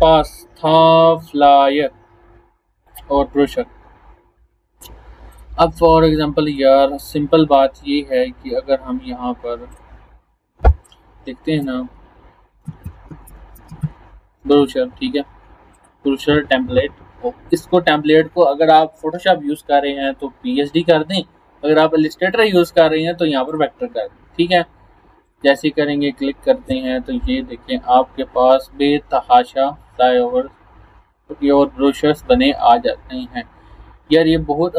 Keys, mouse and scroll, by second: 2.9 click, 4.0 scroll down 1, 5.4 click, 6.0 scroll up 1, 6.5 click, 9.7 click, 11.6-14.3 typing, 15.7 click, 23.5 click, 27.7 scroll down 1, 32.6 scroll down 1, 33.3 scroll down 1, 34.2 scroll down 1.